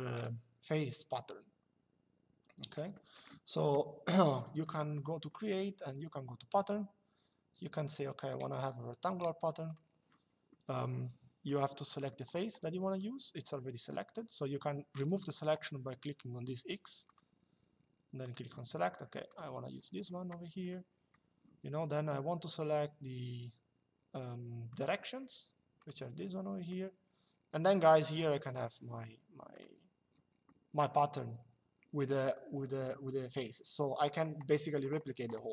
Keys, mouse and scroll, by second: 2.7 middle click, 4.3 click, 9.4 click, 11.2 click, 16.8 click, 17.9 click, 19.0 click, 20.4 middle click, 24.4 click, 25.5 click, 29.2 click.